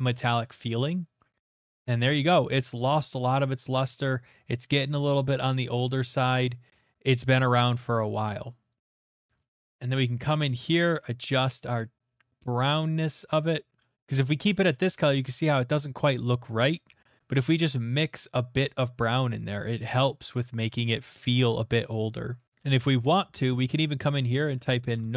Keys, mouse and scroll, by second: 0.1 scroll, 4.0-4.4 scroll, 5.1 middle click, 6.8 click, 9.2 click, 9.4-14.2 middle click, 9.7-11.1 scroll, 13.9 middle click, 15.0 middle click, 19.0 click, 19.8 click, 21.0 click, 22.0 click, 22.5 middle click, 22.5 click, 22.7 z, 23.0 a, 23.5 click, 24.5-24.9 typing.